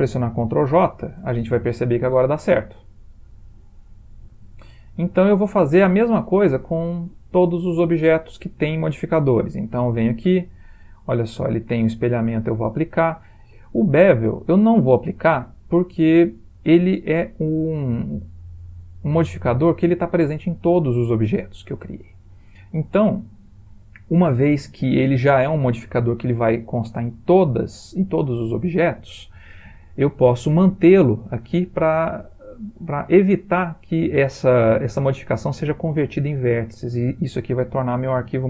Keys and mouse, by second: 0.8 ctrl+j, 1.9-2.9 middle click, 2.6 middle click, 2.7 middle click, 3.1 middle click, 5.0 middle click, 6.1-6.8 shift+middle click, 6.2 middle click, 6.5 shift+middle click, 6.7 middle click, 6.9 middle click, 9.9 click, 11.2 click, 12.3 click, 18.0 ctrl+middle click, 21.3 click, 21.8 click.